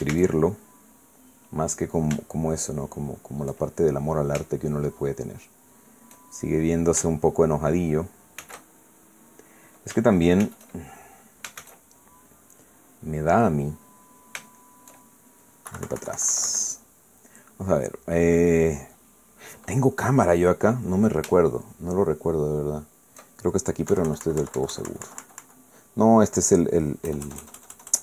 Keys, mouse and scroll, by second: 0.2 shift+z, 1.1 shift+z, 5.5-7.3 shift+middle drag, 9.4 shift+z, 11.4 shift+z, 12.6 shift+z, 13.0-16.0 shift+middle drag, 16.7 KP_Subtract, 17.8 click, 19.1 middle click, 23.1 shift+click, 24.9 KP_Subtract.